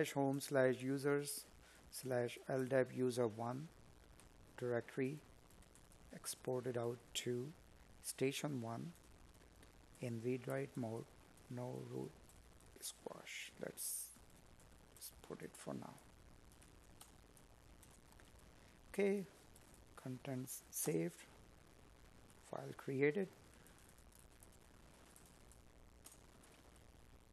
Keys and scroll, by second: 7.6 Escape, 13.6 space, 15.1 Tab, 19.6 space, 20.7 space, 25.0 space.